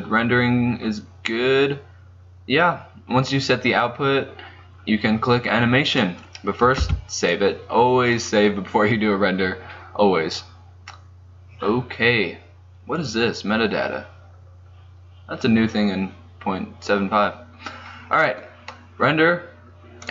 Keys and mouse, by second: 6.9 ctrl+s, 13.1-20.1 drag.